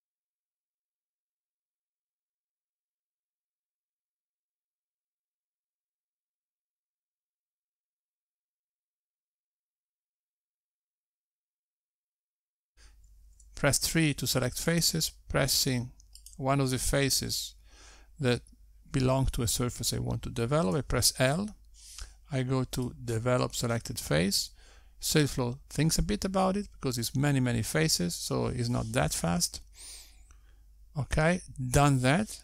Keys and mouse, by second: 1.3 g, 3.3 click, 3.5 click, 3.6 h, 4.0 click, 5.2 `, 6.2 g, 10.4 Tab, 11.5 click, 12.8 3, 14.4 click, 15.9 click, 20.1 l, 22.6 click.